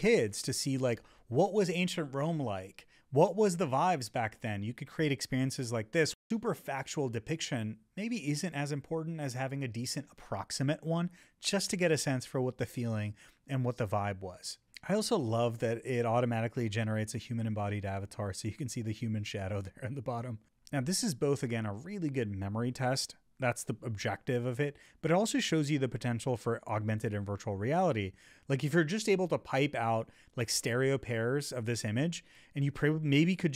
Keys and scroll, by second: 2.0 Down, 3.8 Up, 6.1 Up, 8.6 Up, 23.0 Up, 24.2 Up, 25.9 Down, 26.6 Up, 28.4 Down, 29.2 Up, 29.8 Up.